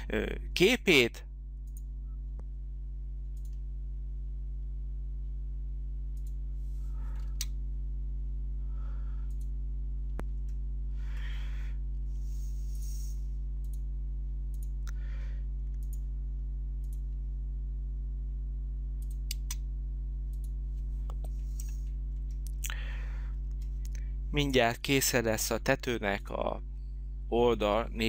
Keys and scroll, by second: 7.2 space, 19.3 space.